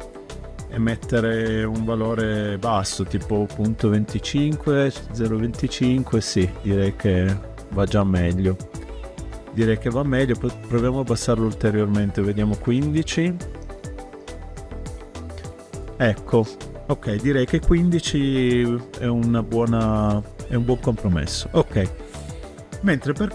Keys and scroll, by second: 1.3 ., 2.0 2, 2.3 5, 2.6 Return, 12.3 1, 12.7 Return.